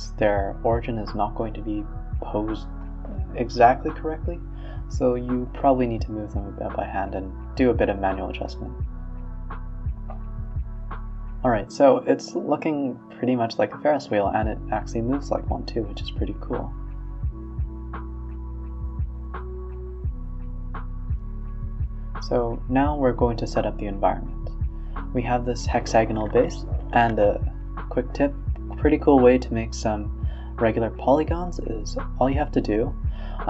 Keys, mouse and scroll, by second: 0.3 s, 1.3 r, 6.1 KP_1, 6.4 KP_3, 7.1 g, 7.7 r, 10.0-11.2 middle drag, 11.2 a, 11.3 a, 11.5 middle drag, 11.7 z, 12.5-13.8 middle drag, 13.8 z, 14.2-15.2 middle drag, 15.2 shift+a, 17.0-18.8 drag, 19.4 Escape, 20.2-22.0 drag, 22.1 g, 22.7 scroll down 2, 23.0 s, 24.1 middle click, 24.6 g, 25.1 middle click, 25.4 Tab, 25.6 scroll up 1, 25.8 e, 26.5 Tab, 26.7-27.4 middle drag, 27.4-28.9 typing, 28.5 middle click, 29.3 scroll up 2, 30.0 z, 30.6-32.2 middle drag, 32.2 click, 32.5-33.0 middle drag, 33.0 click, 33.3 r.